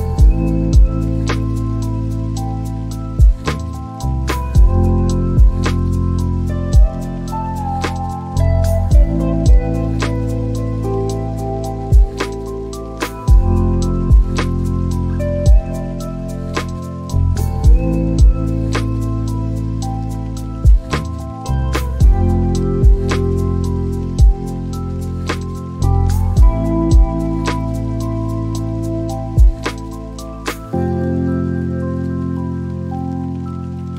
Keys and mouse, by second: 3.5 click, 12.0 click, 26.2 click, 33.4 click.